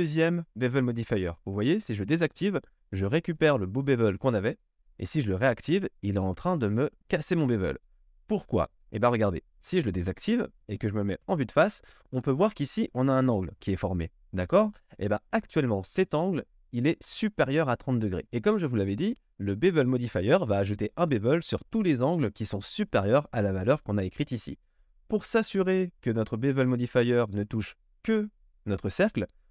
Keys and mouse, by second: 2.1 click, 2.3-5.4 middle drag, 5.4 click, 5.5-10.0 middle drag, 10.0 click, 10.1-29.5 middle drag, 11.2 KP_1.